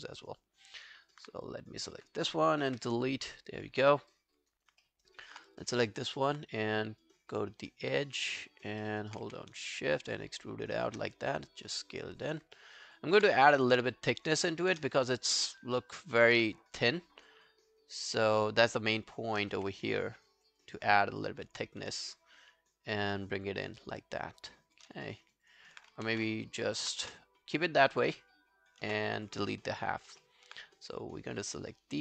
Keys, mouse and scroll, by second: 0.1 alt+right click, 0.4 alt+click, 3.9 alt+scroll down 1, 4.1 alt+click, 4.5 alt+right click, 4.8 alt+middle click, 5.1 alt+right click, 5.9 alt+middle click, 6.1 alt+right click, 8.0 double click, 8.3 scroll down 3, 8.5 alt+click, 8.8 alt+middle click, 9.0 alt+right click, 9.3 w, 9.9 shift+click, 11.2 r, 12.6 alt+middle click, 12.8 alt+right click, 13.0 alt+click, 13.4 r, 15.0 alt+click, 15.8 alt+middle click, 16.0 alt+right click, 17.0 shift+click, 19.6 shift+click, 19.6 w, 19.9 scroll down 1, 20.1 alt+click, 20.8 alt+scroll down 1, 21.0 alt+click, 25.1 alt+middle click, 25.3 alt+right click, 25.5 alt+click, 26.1 ctrl+z, 26.5 alt+click, 27.1 space, 28.9 space, 29.5 alt+middle click, 30.0 alt+right click, 30.2 alt+middle click, 30.6 right click.